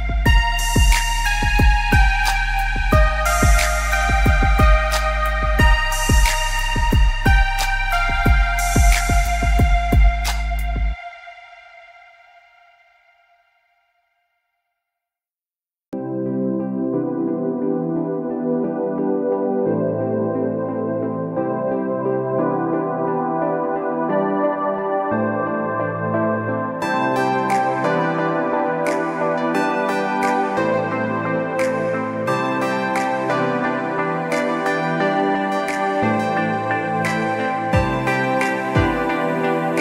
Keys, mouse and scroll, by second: 6.5 space, 6.8 click, 7.0 space, 9.1 click, 24.3 click, 28.2 click, 28.7 space, 29.0 click, 29.1 space, 31.4 click.